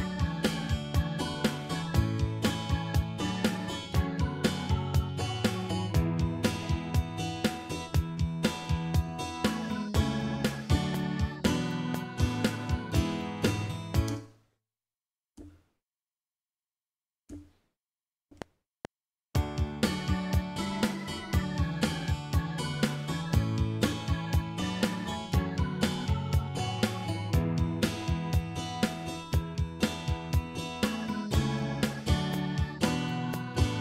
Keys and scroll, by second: 14.1 space, 15.3 x, 18.2 F7.